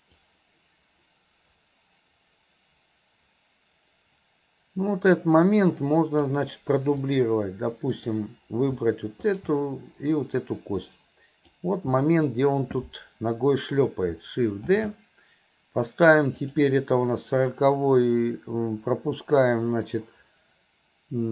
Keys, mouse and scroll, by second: 0.2-6.4 drag, 7.0 click, 7.9 click, 9.3 click, 10.9-11.5 drag.